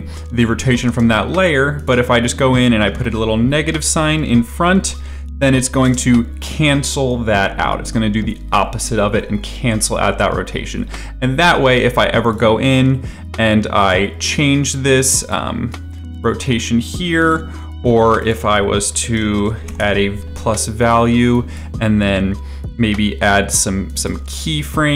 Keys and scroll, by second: 0.8 space, 3.8 Up, 4.0 Left, 4.6 -, 5.8 space, 16.3 2, 18.8-20.3 typing.